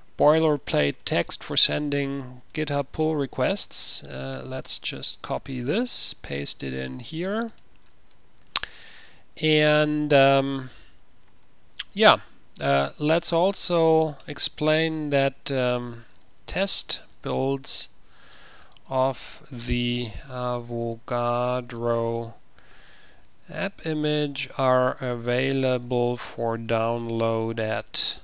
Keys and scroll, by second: 5.1 ctrl+c, 6.4 ctrl+v, 14.4 Return, 16.0-28.2 typing.